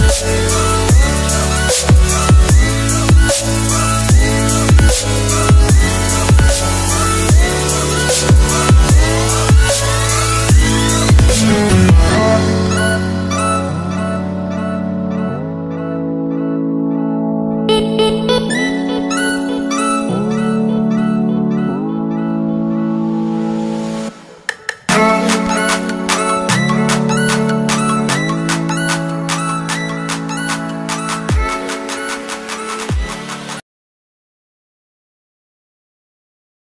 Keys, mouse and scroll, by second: 0.0-1.8 typing, 2.1 click, 2.6 ctrl+t, 3.0 click, 4.4 shift+click, 4.8 shift+click, 5.2 shift+click, 6.1 Return, 6.3 Right, 6.8 Left, 7.2 Down, 7.5 Left, 7.8 Up, 8.2 alt+scroll down 1, 8.9 0, 9.4 click, 11.6 s, 13.6 s, 15.2 click, 28.8 ctrl+c, 29.9 click, 30.8 ctrl+v, 31.6 click.